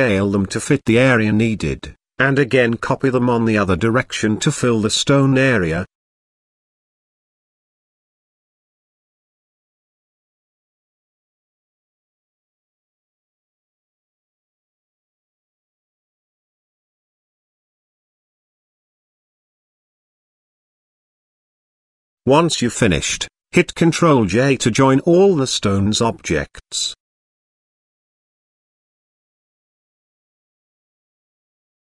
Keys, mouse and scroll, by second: 0.2 shift+click, 1.1 middle click, 1.4 s, 2.9 g, 4.7-5.0 shift+middle drag, 5.9 g, 7.5 KP_0, 9.2 scroll up 1, 9.3 middle click, 9.9-10.2 shift+scroll up 1, 11.5 ctrl+j, 11.9-12.2 middle drag, 12.4-13.0 shift+middle drag, 13.5 shift+d, 16.6 shift+r, 17.9 shift+r, 18.7 shift+click, 19.1 shift+click, 19.4 shift+click, 21.1 ctrl+z, 21.4-21.9 drag, 22.7 click, 23.9 z, 26.4 ctrl+click, 27.3 ctrl+drag, 28.6 z, 29.2 middle click, 30.0 g.